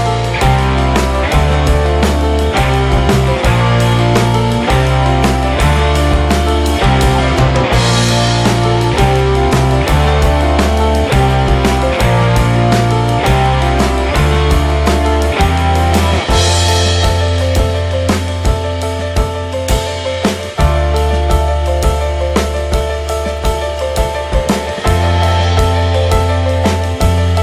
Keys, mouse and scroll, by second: 1.7 click, 1.9 KP_0, 2.0 KP_0, 3.1 alt+middle click, 3.3 alt+middle click, 4.1 alt+middle click, 4.7 click, 5.1-6.3 shift+middle drag, 7.1-9.3 drag, 9.3 KP_0, 10.0 click, 10.5 click, 10.8 alt+middle click, 11.0 alt+middle click, 11.5 alt+shift+middle click, 12.1 g, 12.9 r, 14.4 g, 15.6 shift+d, 16.6 r, 17.9 g, 19.6-19.9 scroll down 2, 19.9-24.7 middle drag, 27.0-27.4 middle drag.